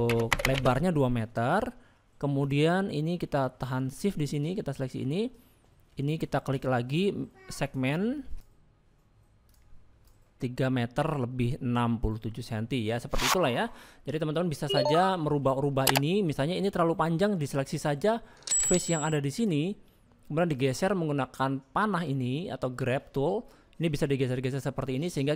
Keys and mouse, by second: 1.4 click, 2.4 click, 10.3 click, 12.2 middle click, 13.0 shift+middle click, 15.4 middle click, 16.2 shift+middle click, 16.6 middle click, 18.9 click, 19.7 click, 20.8 click, 23.8-25.3 drag.